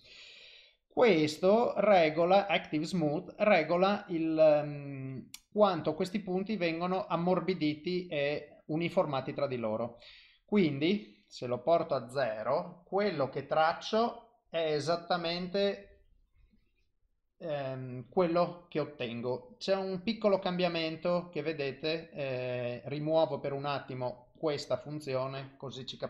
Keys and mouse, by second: 10.8 click, 12.5 click, 18.1 click, 23.4 click, 24.4 click.